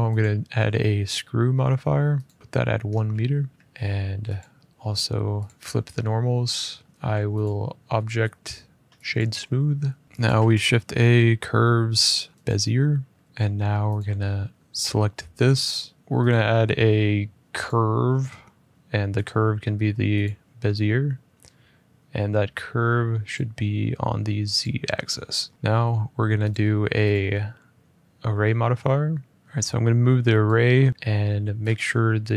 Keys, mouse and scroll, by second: 2.1 click, 2.4 middle click, 2.4 KP_1, 2.6 middle click, 2.7 middle click, 3.3 shift+middle click, 3.5 middle click, 3.5 middle click, 3.6 middle click, 4.2 click, 5.3 click, 6.1 middle click, 6.4 middle click, 6.5-7.2 scroll, 7.2 click, 8.9 click, 10.0 alt+Tab, 10.0 click, 10.1 a, 12.3 click, 12.8 middle click, 12.9 middle click, 13.7 click, 14.7 middle click, 16.0 ctrl+z, 16.0 click, 17.6 click, 20.0 click, 23.1 click, 24.8 click, 25.5 middle click, 26.2 click, 26.8 click, 28.2 a, 29.4 alt+Tab, 30.2 click, 31.5 click, 32.2 typing.